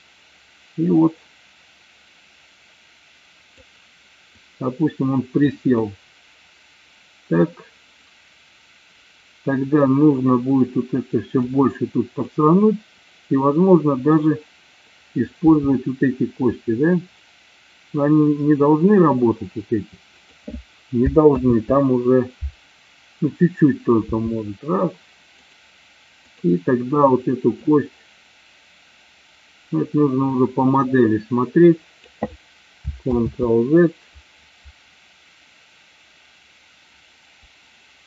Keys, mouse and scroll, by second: 4.4-5.5 drag, 11.6-12.3 drag, 15.4 r, 20.3 click, 21.4 ctrl+z, 24.0 r, 25.6 click, 26.3 click, 27.8-32.2 drag, 33.2 ctrl+z.